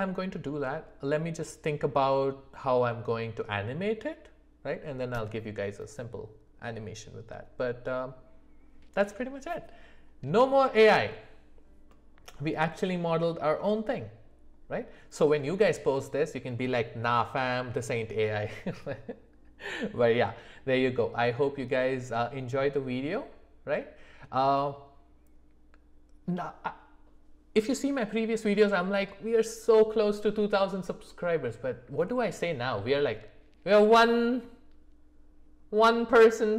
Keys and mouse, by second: 11.9-14.9 middle drag.